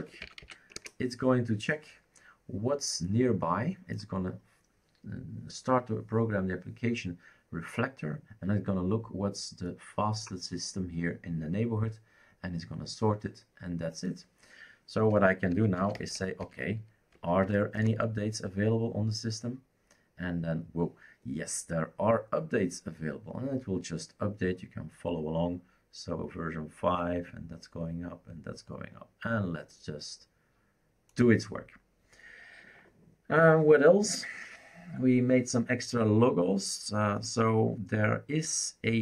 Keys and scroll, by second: 0.0-0.9 typing, 15.3-17.1 typing, 17.7 Return.